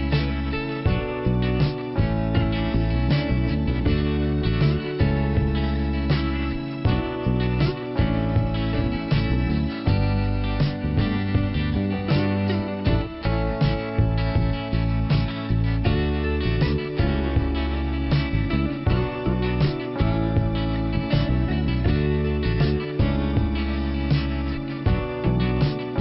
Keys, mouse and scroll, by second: 0.2 scroll up 1, 2.6 click, 3.7 click, 4.3 click, 6.8 click, 11.7 click, 13.4 click, 17.0 click, 19.5 click, 21.2 click, 23.1-23.7 scroll down 1, 24.3 p.